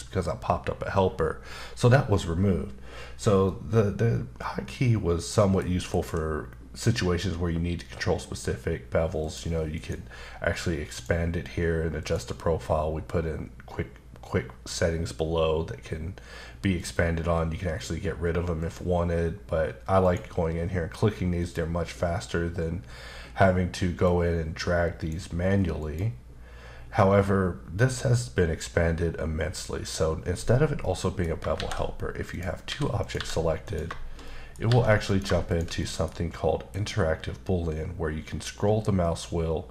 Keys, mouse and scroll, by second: 3.5 middle click, 5.9 ctrl+shift+b, 9.2 click, 9.7 click, 10.9 click, 12.0 click, 16.8 click, 20.0 click, 21.4 click, 24.1 click, 25.8 click, 30.8 middle click, 31.5 shift+a, 32.3 click, 32.7 s, 33.0 click, 33.1 g, 33.6 click, 34.2 middle click, 35.1 click, 35.5 shift+click, 35.8 middle click, 36.7 shift+b, 38.0-39.7 scroll down 2.